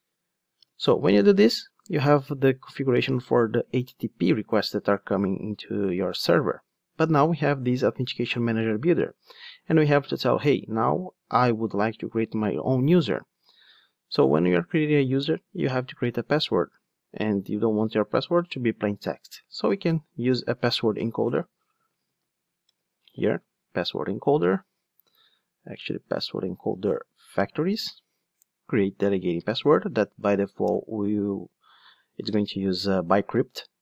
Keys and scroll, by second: 0.0 Return, 0.8 alt+super+l, 23.8 Return, 25.1 super+z, 27.4 Return, 30.2 alt+Return.